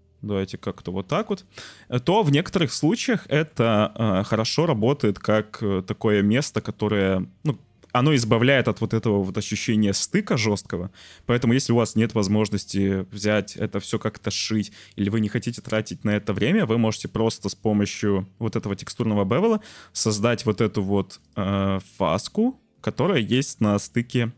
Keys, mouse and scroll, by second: 1.2 click, 1.6 click, 2.7 click, 3.3 shift+click, 4.4 middle click, 21.2 click, 21.9 click, 24.0 ctrl+z.